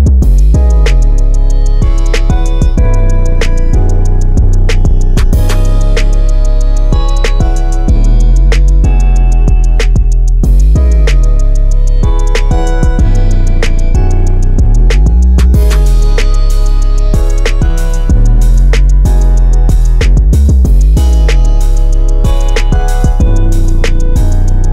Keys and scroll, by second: 1.6-2.4 typing, 12.4 Escape, 17.0 5, 17.5 Return, 19.8-24.7 typing, 21.4 Escape.